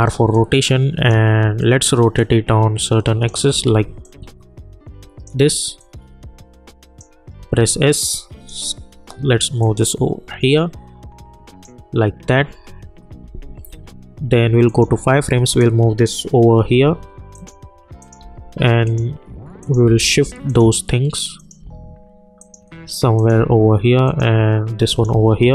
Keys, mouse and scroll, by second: 0.6 click, 3.7 ctrl+z, 4.0-7.3 drag, 7.3 s, 7.9-13.2 drag, 13.4 =, 13.6 =, 14.7 click, 16.6 [, 17.3 click, 18.2 [, 18.8 click, 19.8 [, 20.5 click, 21.6 [, 22.4 click, 23.3 [, 24.0 click, 24.8 a, 25.1 [.